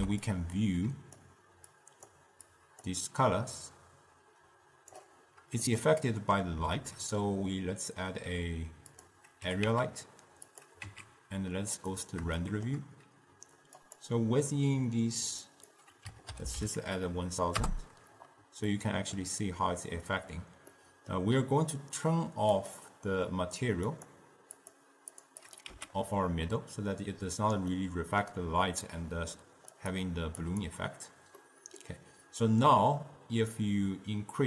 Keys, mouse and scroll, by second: 0.5-1.9 drag, 2.6 click, 3.7-5.8 drag, 5.8-6.8 middle drag, 6.8 shift+a, 9.6 g, 10.9 z, 12.5-13.9 shift+middle drag, 13.9 click, 15.6 click, 16.6 0, 16.6 0, 18.8-22.6 middle drag, 22.6 click, 24.1-25.3 drag, 25.6 click, 26.0 x, 27.8-29.8 middle drag, 29.8-31.5 drag, 31.5-33.7 middle drag, 33.7-34.4 drag.